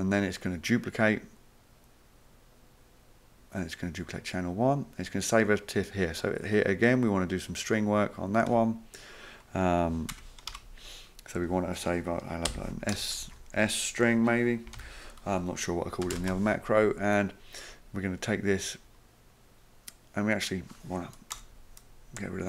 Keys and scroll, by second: 8.5 \, 10.1 BackSpace, 10.5 Return, 12.5-13.2 typing, 14.4-16.2 typing, 21.4 BackSpace.